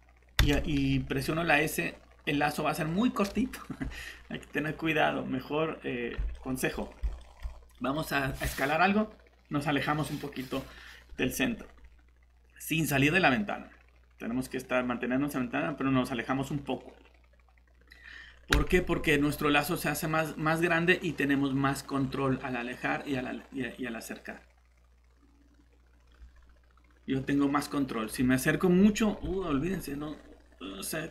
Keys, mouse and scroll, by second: 0.4 s, 3.8 Escape, 6.3 middle click, 18.5 shift+s, 28.0 Escape, 29.2 s.